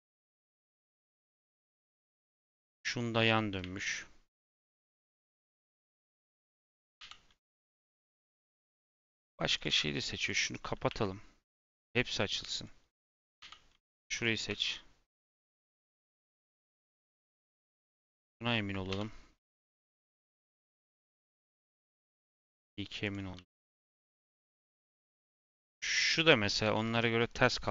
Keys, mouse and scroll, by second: 0.0 g, 1.7 middle click, 2.0 Tab, 2.4 click, 2.8 Tab, 3.2 Tab, 3.5 a, 4.2 click, 5.9 l, 9.5 click, 10.1 click, 10.8 a, 11.5-12.2 scroll down 1, 12.5 click, 14.0 drag, 14.4 r, 16.0 g, 17.4 Tab, 17.6 click, 17.8 Tab, 18.1 click, 20.2 g, 21.5 r, 23.3 g, 25.0 Tab, 25.3 click, 25.5 Tab, 25.9 click, 27.5 click.